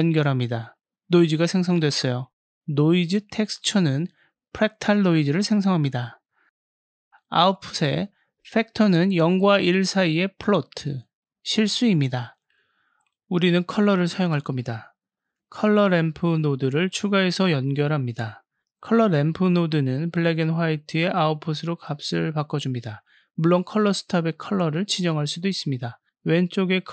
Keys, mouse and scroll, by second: 0.6-1.7 drag, 2.7 click, 4.3 click, 8.0 click, 8.2-9.1 drag, 12.7-13.9 drag, 15.8 shift+a, 20.9 click, 22.4 click, 23.3 click, 24.9-26.9 drag.